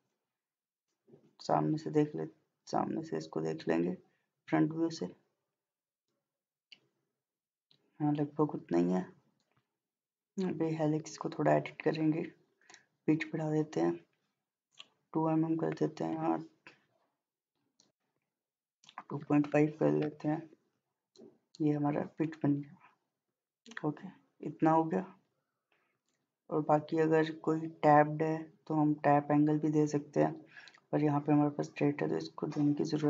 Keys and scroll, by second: 16.1 2, 18.7-19.2 typing, 20.0 Return.